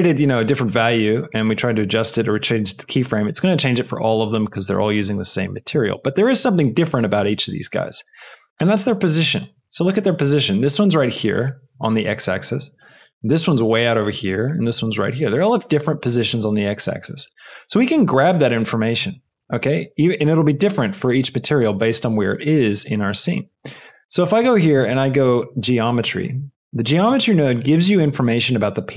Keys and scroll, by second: 24.3 shift+a, 25.2 g, 25.5 e, 25.9 o, 26.5 Return.